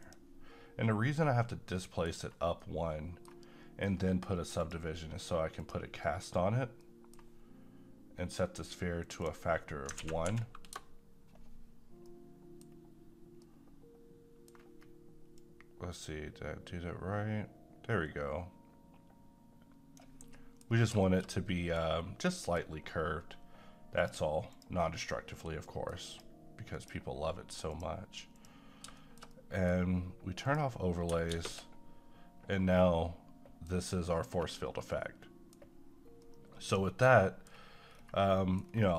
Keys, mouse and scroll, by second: 0.0 click, 1.8 middle click, 2.1 scroll down 1, 2.7-4.6 middle drag, 4.6 click, 6.8-9.1 middle drag, 9.1 click, 10.0 typing, 11.6 a, 12.1 middle click, 12.7-13.4 scroll up 1, 13.4-15.4 middle drag, 15.4-20.3 drag, 20.3 middle click, 20.7 scroll up 1, 21.1 middle click, 24.0 click, 25.7 middle click, 26.1 click, 29.0 shift+middle click, 29.6 middle click, 30.5 click, 31.3 space, 32.2-32.8 scroll up 1, 33.1-33.9 middle drag, 38.0-38.3 scroll down 1, 38.3 middle click, 38.7-38.9 scroll down 1.